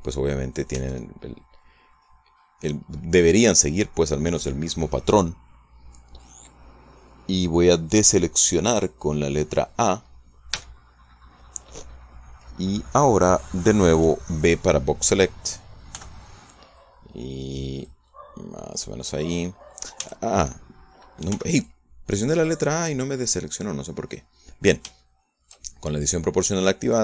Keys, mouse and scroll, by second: 0.6 middle click, 1.6 Tab, 2.8-6.0 middle drag, 11.4 a, 16.8 b, 17.4-18.9 drag, 19.0-20.7 middle drag, 20.9 a, 22.2 b, 22.5-24.3 drag, 24.5-25.7 drag, 25.7-26.9 shift+middle drag.